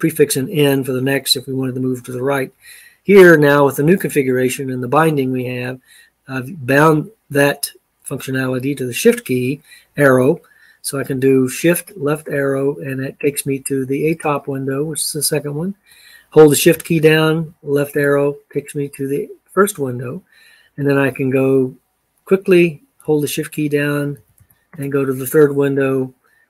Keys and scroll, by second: 11.7 shift+Left, 17.4 shift+Left, 24.1 shift+Right, 24.4 shift+Right.